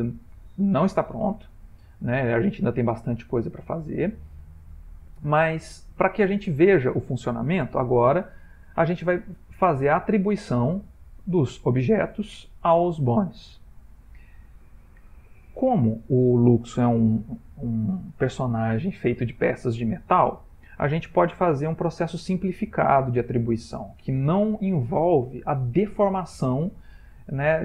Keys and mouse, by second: 1.3 shift+middle click, 2.8 ctrl+middle click, 2.9 shift+middle click, 6.5 Tab, 10.0 shift+middle click, 10.7 click, 11.2 g, 12.8 click, 17.0 shift+middle click.